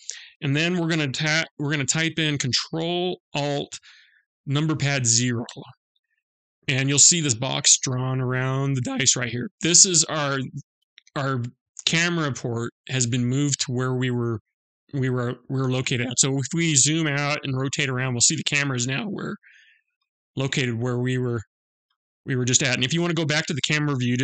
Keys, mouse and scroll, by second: 4.8 ctrl+alt+KP_0, 14.7-15.0 scroll down 2, 15.0 scroll up 2, 15.7 scroll down 1, 15.9-16.2 scroll down 1, 16.2 middle click, 17.1-17.7 scroll down 5, 17.3 d, 18.2 scroll down 1, 18.3 middle click, 19.4 scroll up 1, 19.5 scroll down 1, 19.7-20.9 scroll up 5, 20.9 middle click.